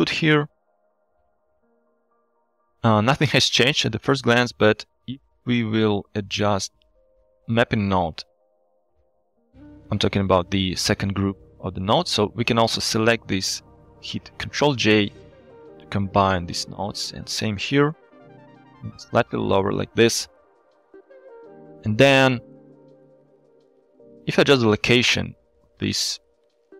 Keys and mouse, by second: 0.0 shift+middle click, 1.5 shift+middle click, 2.3 shift+middle click, 4.8-5.1 shift+drag, 6.0 click, 6.8-7.6 middle drag, 10.4 drag, 12.1-13.7 drag, 14.7 ctrl+j, 16.2 shift+middle click, 16.6-17.0 drag, 18.6 g, 20.0 shift+click, 21.4 click, 23.2 click, 24.0 shift+click.